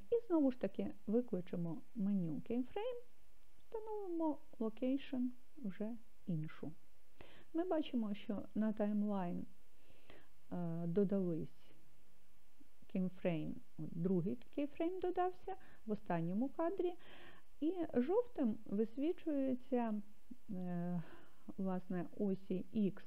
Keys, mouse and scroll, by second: 1.9 i.